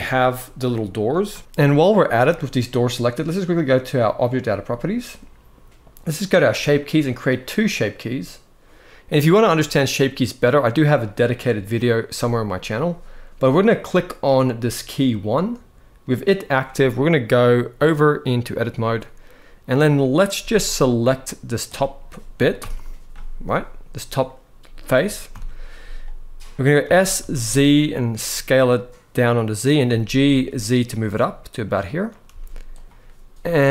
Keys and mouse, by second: 4.0 click, 7.5 click, 17.5-18.3 drag, 20.0 z, 20.8 click, 22.3 ctrl+l, 23.2 click, 25.1 ctrl+l, 26.5 s, 26.9 z, 29.0 click, 29.5 g, 30.0 z, 31.7 click, 32.0 z, 33.1 z.